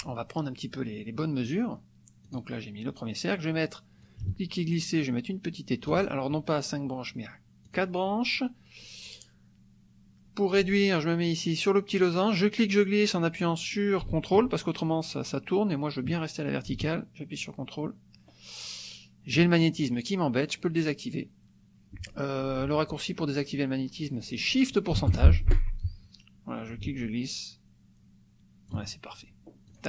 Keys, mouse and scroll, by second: 2.3 click, 4.1-6.0 ctrl+drag, 7.7 click, 12.5-19.5 drag, 26.8-28.9 ctrl+drag, 29.7 click.